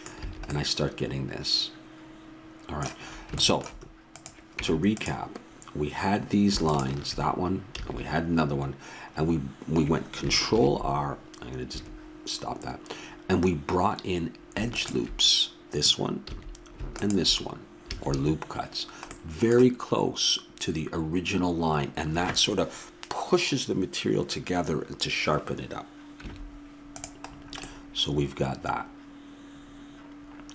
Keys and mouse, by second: 4.1-5.7 drag, 4.6 Tab, 6.7-8.5 drag, 7.8 a, 10.5 ctrl+r, 14.7-16.4 drag, 16.3 a, 17.0-18.8 drag, 17.8 a, 19.2-21.4 middle drag, 21.8-26.2 middle drag, 26.2 Tab.